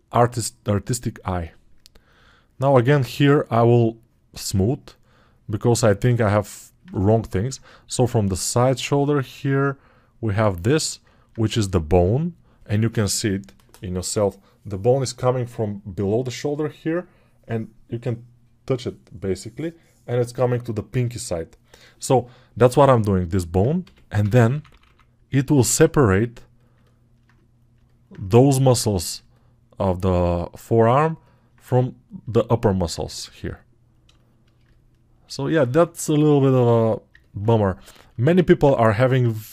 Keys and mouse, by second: 26.6 ], 38.8 alt+1.